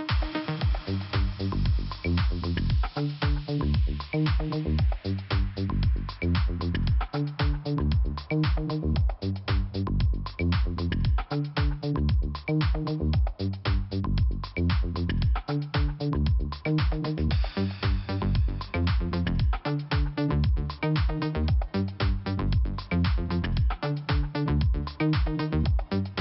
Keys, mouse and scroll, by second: 0.7 click, 1.5 click, 4.1 click, 5.5 click, 7.1 click, 8.1 click, 9.2 click, 9.3 click, 9.9-10.6 scroll down 2, 10.6 scroll up 1, 11.3 click, 11.3 click, 11.8 scroll up 1, 16.3 click, 16.4 click, 16.7 click, 16.9 double click, 18.2 click, 19.7 click, 21.2 click, 22.7 click, 24.7-25.0 scroll up 2, 25.2 click, 26.1 click.